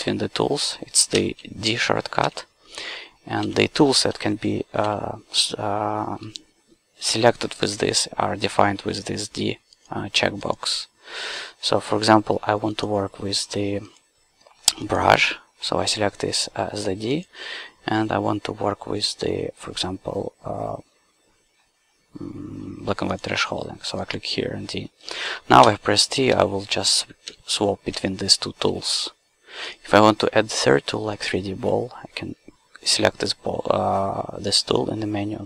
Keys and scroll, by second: 1.2 d, 3.5 d, 25.6 d, 28.0 d.